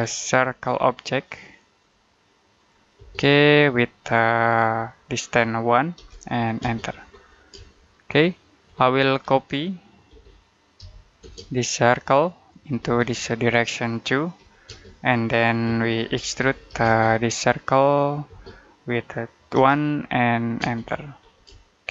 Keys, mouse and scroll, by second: 0.1 middle click, 0.6-1.6 scroll up 1, 1.6 click, 2.8 space, 5.8 1, 6.5 space, 7.0-7.4 scroll down 1, 7.5 shift+middle click, 8.8-10.0 scroll up 1, 10.0-11.1 typing, 12.4 click, 12.7 space, 12.9 click, 14.2 2, 14.5 space, 15.7-17.1 typing, 17.8 click, 18.2 space, 19.4 1, 20.5 space, 21.1 scroll down 1, 21.5 shift+middle click.